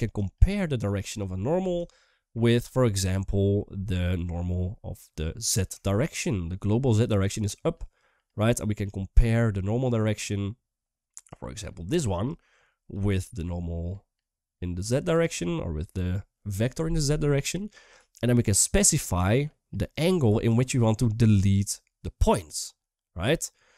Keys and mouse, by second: 0.0-1.0 typing, 1.7-2.0 shift+middle drag, 5.6-5.9 shift+middle drag, 7.1-7.7 d, 7.2 click, 7.7 click, 8.6 d, 9.9 d, 11.0-12.0 drag, 11.0-12.0 typing, 13.1-15.0 drag, 13.1 d, 15.0-18.3 d, 18.3-19.8 drag, 20.2-21.2 drag, 20.2-22.0 typing, 23.2 shift+middle click.